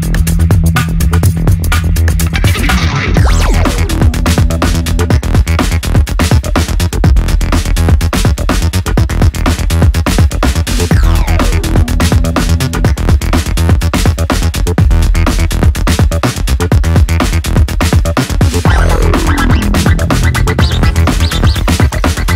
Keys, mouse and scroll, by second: 10.7-14.1 drag, 17.4 click.